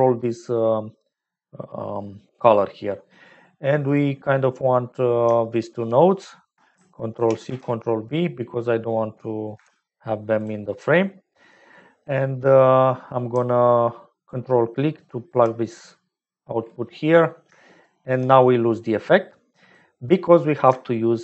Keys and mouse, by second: 0.9 middle click, 2.7 middle click, 3.8 click, 5.5 shift+click, 7.1 ctrl+c, 7.6 ctrl+v, 9.5 g, 10.7 click, 11.7 click, 14.2-15.5 ctrl+drag, 17.0 middle click, 17.6 shift+click, 20.5 click.